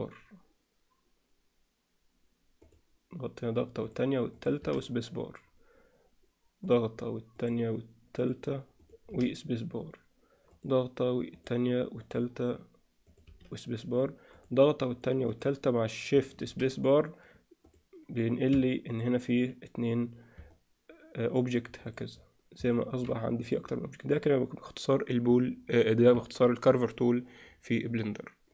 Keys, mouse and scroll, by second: 18.9 click, 20.4-21.5 alt+middle drag, 21.8 drag, 22.7 alt+middle drag, 23.4 click.